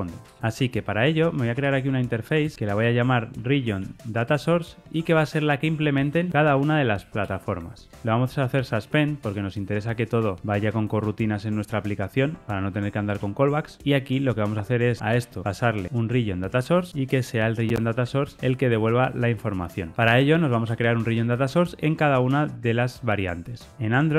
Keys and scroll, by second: 2.7 Return, 7.8 Tab, 9.1 Return, 13.0 Return, 16.6 Tab.